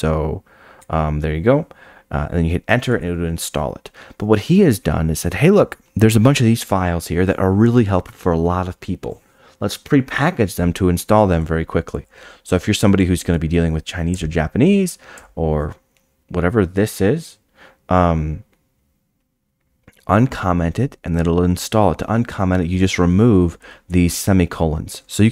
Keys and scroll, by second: 2.9 Down, 2.9 Return, 2.9 shift+g.